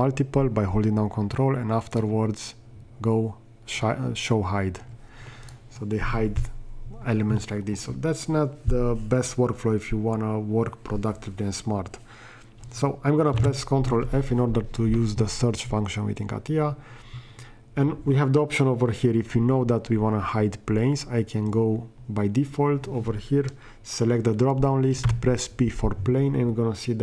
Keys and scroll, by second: 13.5 ctrl+f, 25.2 p.